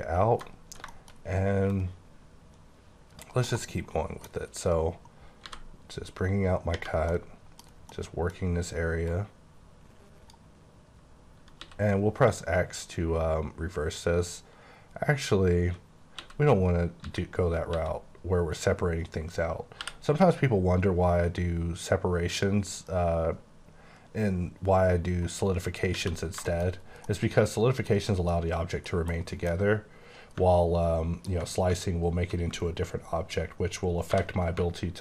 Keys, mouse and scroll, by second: 0.5 scroll up 2, 0.9 shift+middle click, 1.1-1.7 shift+scroll up 2, 1.7 click, 3.4 middle click, 3.7-4.2 KP_1, 5.4 b, 6.7 space, 7.1 middle click, 7.6 scroll down 3, 7.9 middle click, 8.4 scroll up 1, 9.1 click, 11.6 x, 16.2-17.7 typing, 19.8 t, 22.3 t, 22.3 click, 23.2-23.7 scroll up 6, 26.4 middle click, 26.7 scroll down 3, 27.0 middle click, 28.0 scroll up 3, 28.3 middle click, 29.1 KP_1, 29.8-30.4 scroll up 2, 31.3 ctrl+click, 34.1 j.